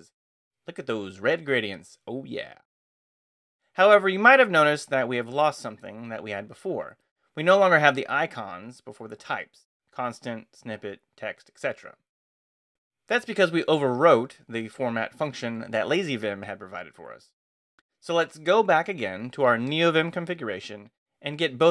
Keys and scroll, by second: 0.1 ctrl+d, 0.3 ctrl+n, 3.5 Return, 8.8-10.4 typing, 13.2 ctrl+n, 15.9 Return, 16.5 Escape, 16.9-18.4 typing, 18.5 Return.